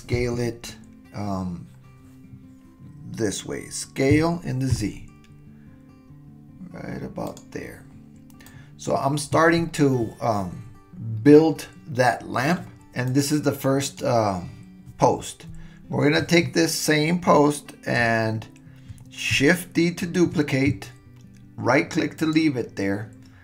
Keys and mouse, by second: 0.1 KP_1, 4.1 s, 8.5 click, 13.8 click, 20.1 shift+d.